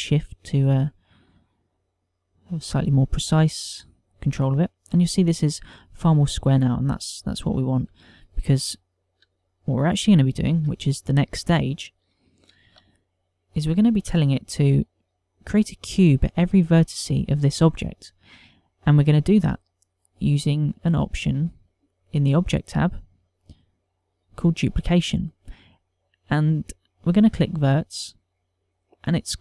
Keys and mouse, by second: 8.1 middle click, 8.9 ctrl+middle click, 9.6 shift+middle click, 10.4 ctrl+middle click, 10.8 middle click, 11.6 ctrl+middle click, 12.4 ctrl+middle click, 13.6 Tab, 20.9 click, 21.8 click, 28.4 click.